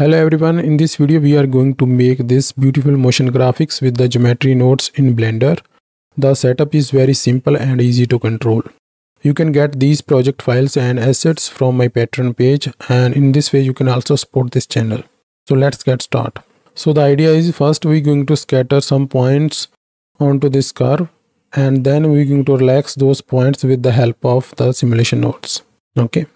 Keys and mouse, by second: 25.5 middle click.